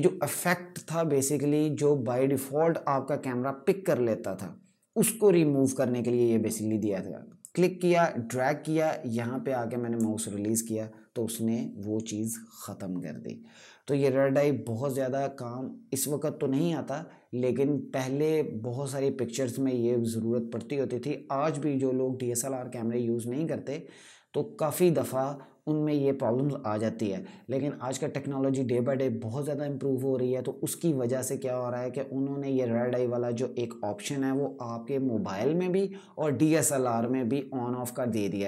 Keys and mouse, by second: 7.1 click.